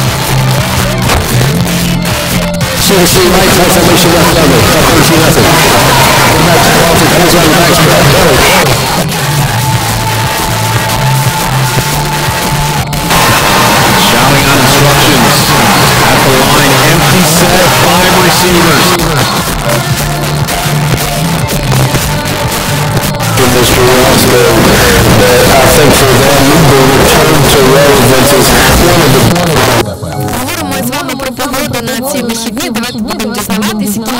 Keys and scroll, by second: 8.6 Page_Down, 12.5 typing, 18.9 Page_Down, 22.9 typing, 29.3 Page_Down.